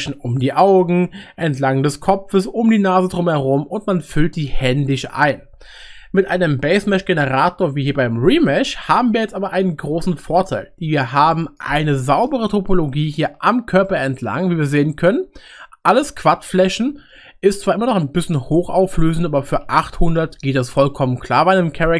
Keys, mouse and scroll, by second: 11.3-13.2 middle drag, 13.8 shift+middle click, 20.0 shift+middle click.